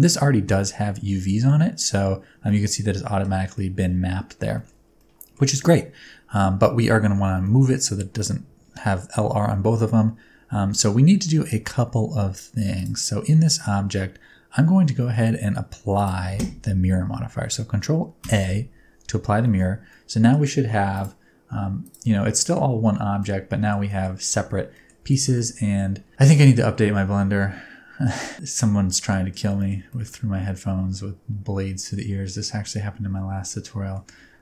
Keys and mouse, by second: 2.5 middle click, 3.5-3.9 middle drag, 4.5 shift+middle click, 5.0 middle click, 7.4-7.7 middle drag, 12.7 click, 15.0 shift+middle click, 15.9 click, 18.4 ctrl+a, 19.5 middle click, 19.9 middle click, 21.0 click, 22.4 middle click, 22.8 Tab, 23.2 middle click, 23.9 middle click, 24.4 alt+z, 24.7 middle click, 25.0 alt+z, 25.4 Tab, 25.4 middle click, 26.1 Tab, 26.1-29.3 middle drag, 29.6 shift+middle click, 29.9-33.9 middle drag, 34.3 Tab.